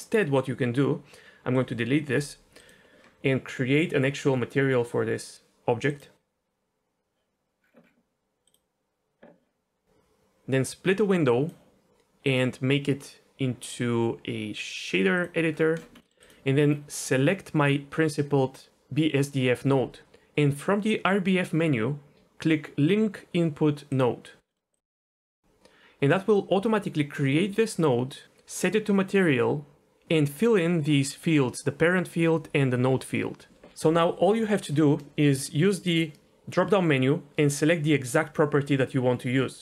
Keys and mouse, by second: 1.6 Delete, 3.8 click, 10.8 click, 12.2-15.2 drag, 16.1 middle click, 16.2 click, 17.0 click, 23.9 click, 24.5 middle click, 24.7 click, 25.0 click, 36.0-39.6 drag.